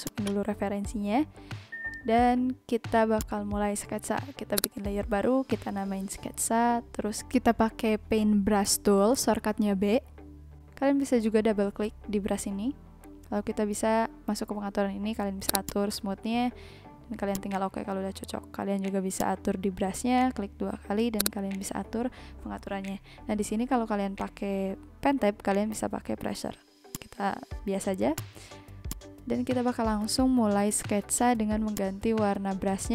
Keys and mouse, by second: 0.0 click, 3.1 click, 7.5 click, 31.7 click.